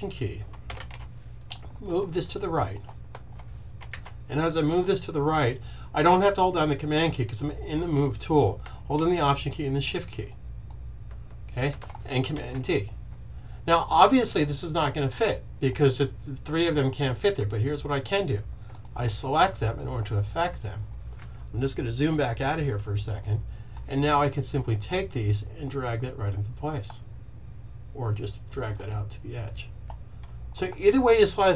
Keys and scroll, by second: 0.7 super+z, 3.8 super+z, 12.4 super+d, 21.9 super+-.